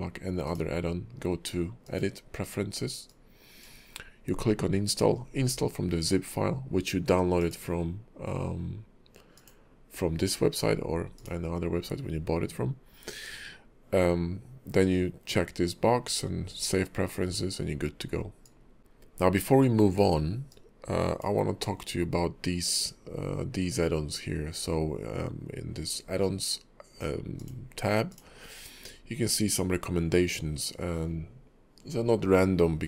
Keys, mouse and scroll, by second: 0.4 click.